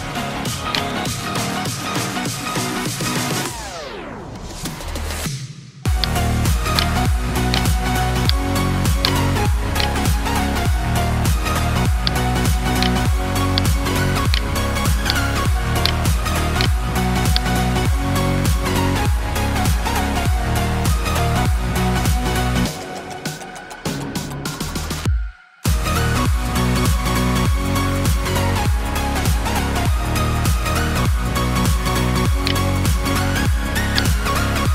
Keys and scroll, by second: 2.6 alt+BackSpace, 3.8 ctrl+d, 7.7 ctrl+space, 8.2 ctrl+space.